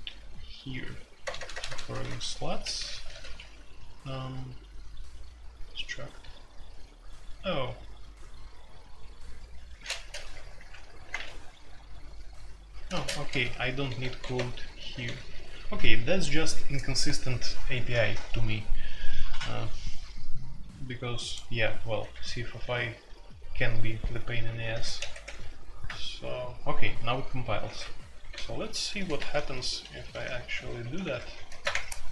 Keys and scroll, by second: 1.2-3.2 typing, 10.1 ctrl+n, 10.6 Return, 12.9-16.3 typing, 22.1 Escape, 24.4 Escape, 24.6 F2, 24.9 ctrl+c, 25.1 ctrl+c, 27.6 alt+2, 28.3-29.3 typing, 29.3 alt+p, 29.8 alt+p, 30.1 alt+p, 30.5 alt+p, 31.2-32.1 typing.